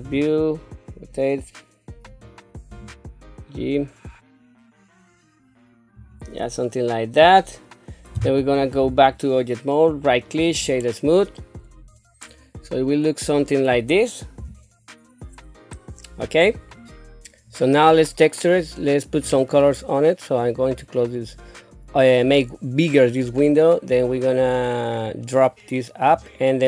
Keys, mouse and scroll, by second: 0.0 r, 2.7 g, 8.8 Tab, 9.9 right click, 10.6 Tab, 14.4 KP_1, 19.3-20.6 drag, 25.0-26.1 drag.